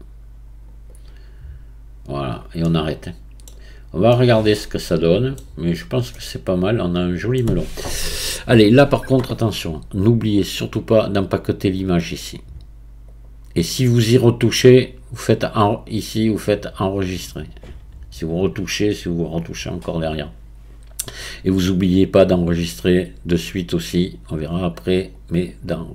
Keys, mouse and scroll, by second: 0.9-2.7 right drag, 2.7-3.5 middle drag, 3.5-4.2 scroll down 1, 4.2-5.4 middle drag, 5.4-6.1 scroll down 2, 6.1-12.3 middle drag, 12.4 middle click, 13.3-25.5 drag.